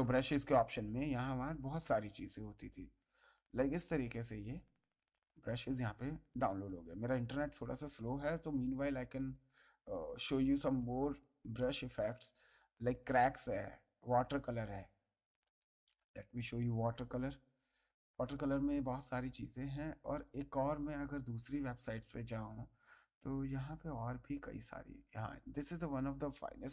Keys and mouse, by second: 15.4 right click, 16.1 click, 18.3 click, 19.4 click, 26.1 click.